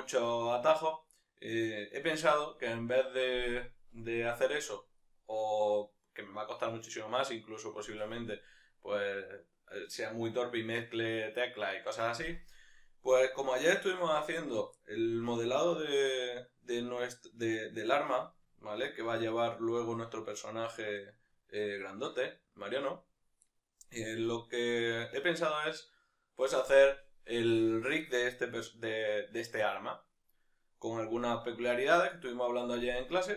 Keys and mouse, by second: 5.0-16.3 middle drag, 16.3 right click, 17.4-33.3 middle drag.